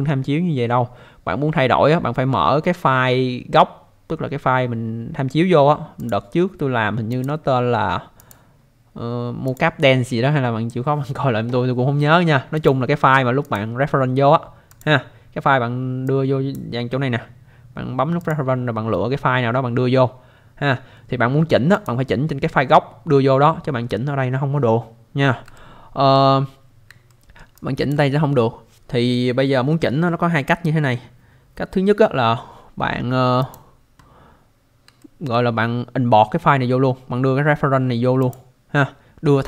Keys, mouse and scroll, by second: 6.0 click, 7.1 click, 8.2 click, 9.5 click, 12.6 click, 13.4 click, 14.7 click, 16.1 click, 18.2 click, 21.7 click, 25.5 alt+middle click, 26.5-26.8 scroll down 1, 27.1 alt+middle click, 27.5 alt+click, 33.4 click, 35.0 alt+middle click, 38.2 click.